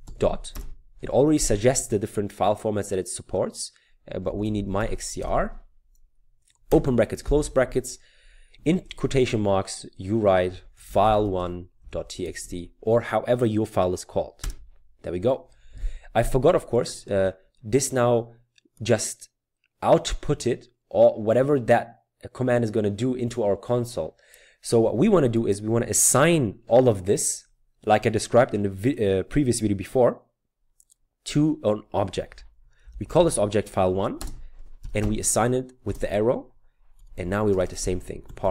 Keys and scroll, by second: 0.0-1.1 typing, 4.1-5.7 typing, 6.7 typing, 8.8 typing, 10.8-12.4 typing, 14.4 typing, 32.7-35.0 typing, 36.7-38.5 typing.